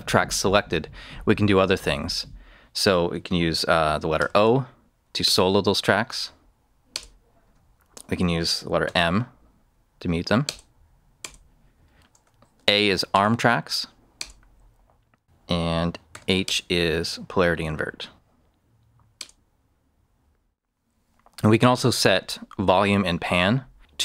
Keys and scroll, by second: 4.1 o, 5.2 Return, 8.8 m, 10.4 Return, 12.1 a, 13.1 Return, 16.1 h, 16.4 Return.